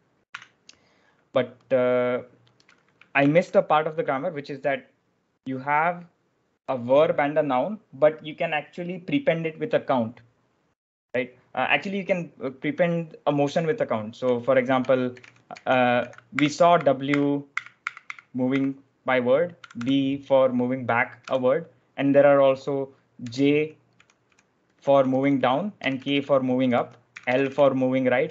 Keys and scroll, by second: 0.3 Escape, 3.1 ctrl+d, 13.8-21.1 typing, 22.8-28.3 typing.